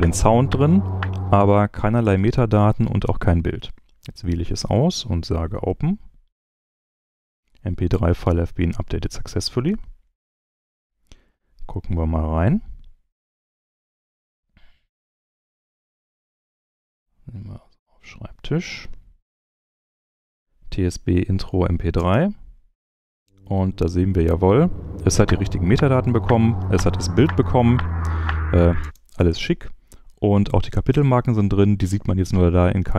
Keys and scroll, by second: 21.9 space, 28.8 space.